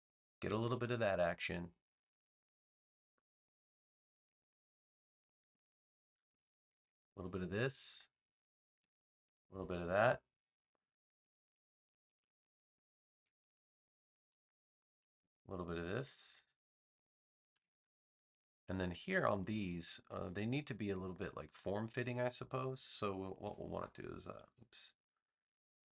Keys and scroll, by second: 23.4 a.